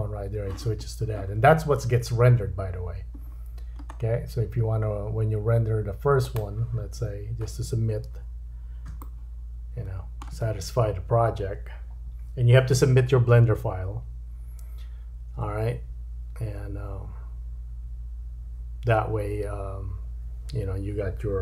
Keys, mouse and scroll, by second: 3.2-3.9 scroll down 4, 3.9-6.2 scroll up 6, 6.2 click, 7.6 space, 9.0 shift+middle click.